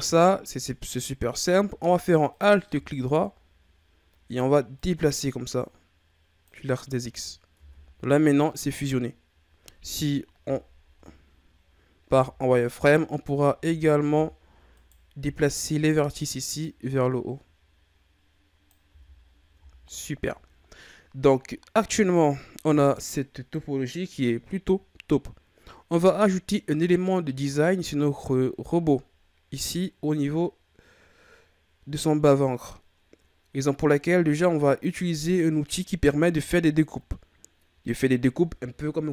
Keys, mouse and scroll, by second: 2.3 alt+right click, 3.0-4.8 scroll down 4, 4.8-7.5 drag, 7.5 Tab, 10.8-12.0 shift+scroll up 4, 12.0 z, 13.3 z, 13.6 z, 14.1 Tab, 14.7 right click, 15.1 b, 16.6-18.9 drag, 18.9 z, 19.2-20.1 scroll down 6, 20.1-22.4 scroll up 2, 22.4-24.4 scroll up 1.